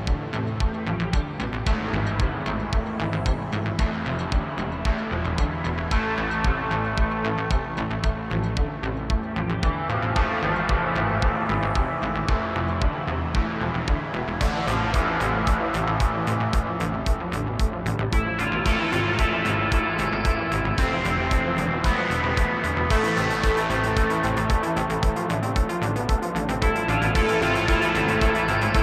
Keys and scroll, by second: 3.2 typing, 16.5-17.7 typing.